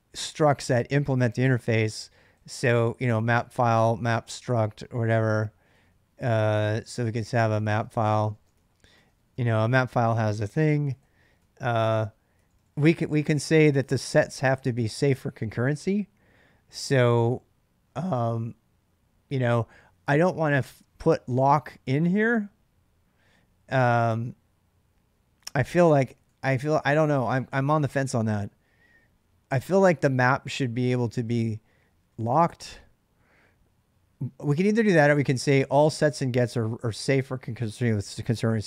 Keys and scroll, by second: 2.0-14.1 typing, 20.3 k, 21.6 j, 25.6-29.3 typing, 34.6 j.